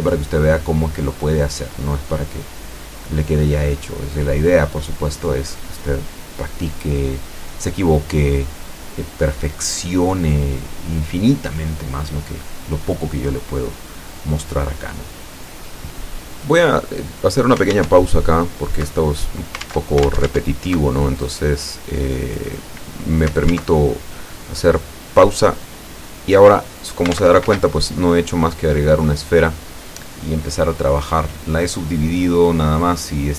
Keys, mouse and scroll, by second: 0.5 click, 0.8 middle click, 1.9-3.1 drag, 3.2 middle click, 4.4 click, 5.1 click, 5.8 click, 6.6 click, 8.0 click, 8.9-10.5 drag, 9.5-10.5 right drag, 10.8-14.7 drag, 15.2 click, 16.6-17.2 scroll down 2, 17.2-20.1 middle drag, 20.1 Tab, 24.9 ctrl+r, 28.3 a, 29.6 c, 30.3-33.3 drag.